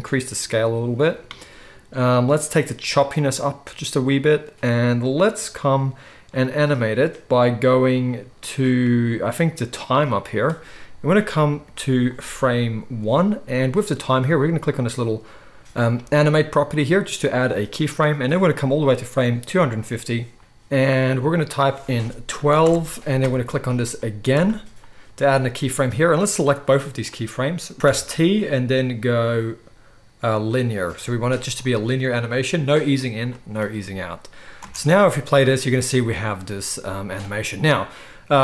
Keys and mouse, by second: 16.3-18.2 middle drag, 18.2-24.3 drag, 24.3-25.9 middle drag, 25.9-27.7 drag, 27.8 t, 34.6 space, 35.4-38.4 middle drag.